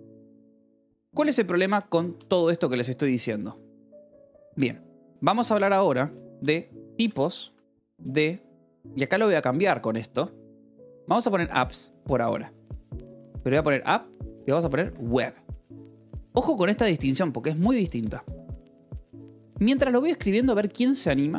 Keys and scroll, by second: 0.8 Escape, 1.0 k, 1.9 j, 2.8 j, 4.0 Escape, 5.1 o, 5.5 Return, 6.2-8.4 typing, 10.2-11.1 typing, 13.2-14.5 typing, 14.7 Escape, 16.0 o, 16.5 Escape, 17.7 o, 18.2 :, 18.3 space.